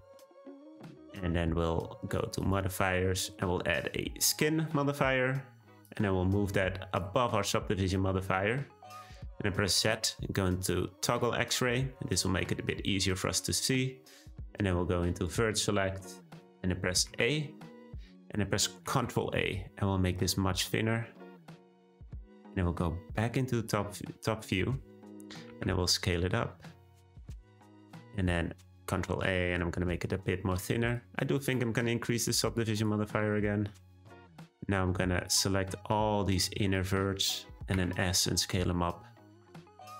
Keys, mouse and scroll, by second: 4.2-5.4 drag, 5.8-7.0 drag, 8.2-9.7 middle drag, 9.7 z, 11.7-14.7 middle drag, 15.2 click, 15.8-17.1 middle drag, 17.1 a, 17.6-18.9 middle drag, 18.9 ctrl+a, 23.2 `, 25.5 s, 27.6-28.9 scroll up 1, 28.9 ctrl+a, 32.2-33.3 drag, 33.3 shift+middle click, 34.0-35.2 scroll up 1, 35.2 click, 37.8 s.